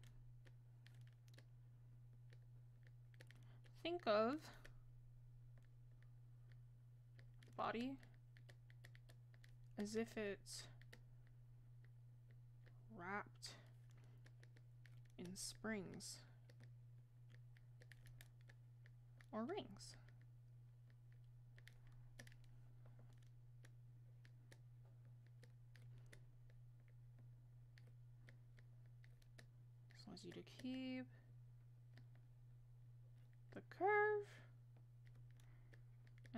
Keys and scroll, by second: 22.8 ctrl+z.